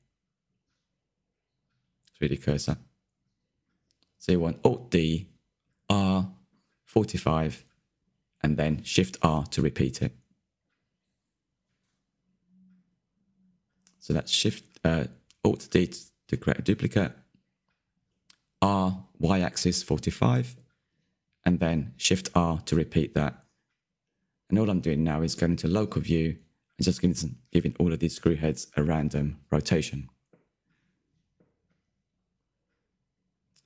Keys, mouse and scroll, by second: 2.2 shift+r, 2.6 shift+r, 3.7-4.7 middle drag, 4.7 shift+r, 5.1 shift+r, 5.6 click, 5.9-7.0 middle drag, 7.0-7.5 scroll down 4, 7.5-9.0 middle drag, 9.0-9.9 scroll up 7, 11.4-13.6 drag, 13.6-15.1 middle drag, 15.1 click, 16.5 click, 16.9-18.8 shift+middle drag, 18.8 ctrl+click, 21.2-21.9 shift+middle drag, 21.9 click, 22.9 middle click, 23.4 click, 23.7 click, 24.4 shift+middle drag, 24.6 click, 24.9 click, 25.6 shift+middle click, 25.9 scroll up 2, 26.0 click, 26.3 click, 27.3 shift+middle click, 27.9 click, 28.3 click, 29.2 click, 30.0 scroll down 2, 30.1 middle drag, 30.4 scroll up 2, 30.5 click, 30.8 click, 31.2 middle click, 31.4 scroll down 1, 31.5 shift+middle click, 31.7 click, 33.0 click, 33.1-33.6 scroll down 2, 33.2-33.5 middle drag.